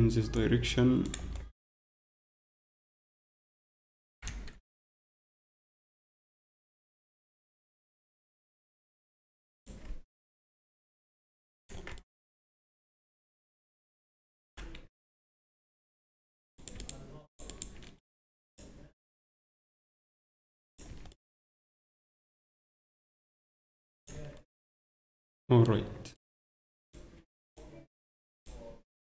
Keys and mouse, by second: 1.2 Tab, 1.6 click, 2.8 Tab, 6.6 Tab, 8.4 Tab, 10.3 g, 11.7 Tab, 13.2 Tab, 14.8 z, 15.7 z, 16.5-19.5 right drag, 18.1-19.3 drag, 19.5-20.7 drag, 20.9 Tab, 22.8 Tab, 22.9 s, 24.1 Tab, 26.4 Tab, 26.8 click, 28.0-29.0 right drag.